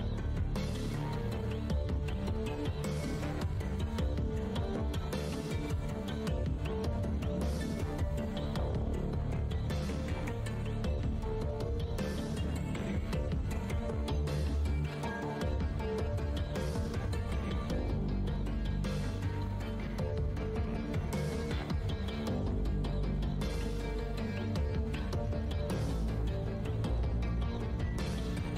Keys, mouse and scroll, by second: 0.0 Tab, 0.1 0, 1.3 0, 2.5 alt+click, 2.7 Tab, 2.7 w, 3.0 f, 3.7 space, 5.5-6.5 scroll down 1, 8.4 space, 12.0 click, 14.3 End, 15.6 Home, 16.7-17.6 typing, 18.7 End, 20.5-23.2 typing, 23.2 Return, 24.6-25.0 scroll down 1, 25.7-26.1 scroll, 26.1-26.4 scroll up 1, 26.6 5.